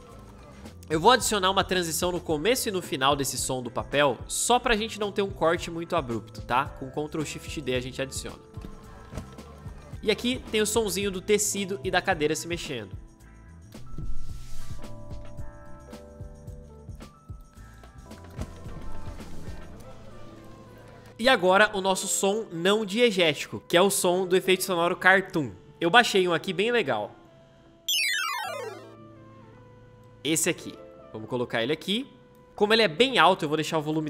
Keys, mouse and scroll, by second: 3.1 ctrl+shift+d, 8.3 space, 13.6 space, 15.7 o, 20.8-21.6 typing, 27.7 space, 33.9 \.